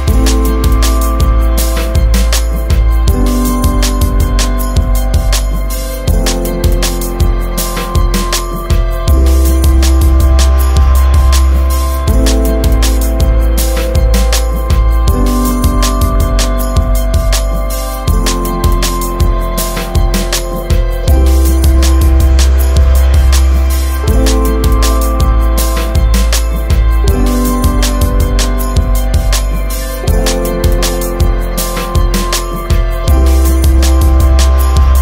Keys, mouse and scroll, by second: 4.2 click, 5.0 right click, 7.0 scroll down 1, 7.4 shift+right click, 12.3 shift+right click, 16.0 right click, 16.8 right click, 18.2 right click, 19.6 right click, 28.4 right click, 29.2 click, 29.8 right click, 31.6 click.